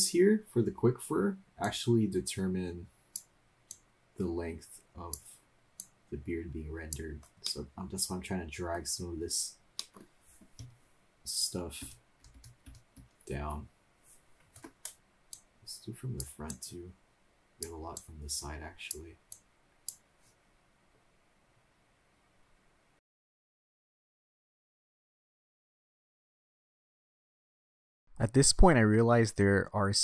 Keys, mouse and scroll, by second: 1.6-3.2 drag, 3.8-5.1 drag, 5.8-7.0 drag, 7.4-8.7 middle drag, 9.8 middle click, 10.6 KP_3, 11.8-13.0 typing, 15.4-16.3 drag, 16.6-17.8 drag, 17.9-19.0 drag, 19.4-20.0 drag, 25.0-26.9 drag, 27.1-29.0 drag, 29.0 middle click, 29.0-30.0 drag.